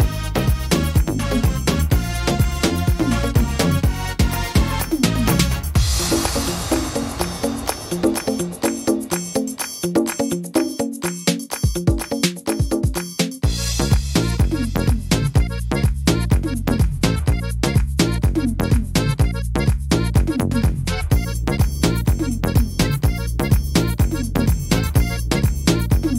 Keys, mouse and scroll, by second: 1.9 ctrl+r, 3.5 middle click, 4.6 middle click, 6.1 click, 7.1 click, 8.1 right click, 9.1 click, 10.0 middle click, 10.5 scroll up 3, 11.0 middle click, 11.4-12.0 scroll down 1, 12.0 right click, 13.4 click, 14.0 right click, 14.7 shift+right click, 15.4 middle click, 17.9 e, 20.4 middle click, 20.8 scroll down 2, 21.3 middle click, 22.5 click, 23.9 middle click, 24.2 scroll down 2, 24.7 middle click, 25.0 scroll up 3, 25.5 shift+middle click, 25.9-26.1 scroll up 1.